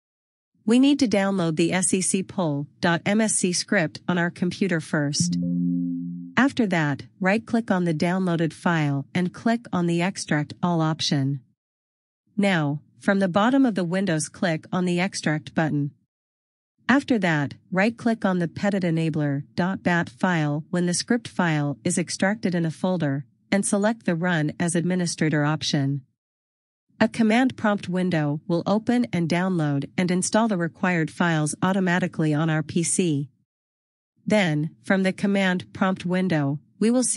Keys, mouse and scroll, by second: 4.5 click, 7.4 click, 9.7 double click, 11.9 click, 12.2 double right click, 15.1 click, 16.5 right click, 21.9 click, 24.3 click, 31.0 scroll down 1, 32.2 click, 35.3 click.